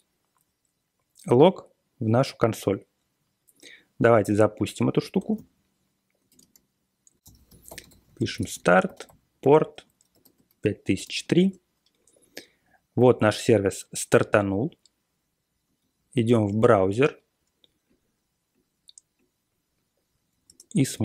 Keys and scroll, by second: 5.1 ctrl+c, 6.0-11.8 typing, 14.4 super+Tab, 15.6 super+Tab, 20.2 3, 20.4 Return.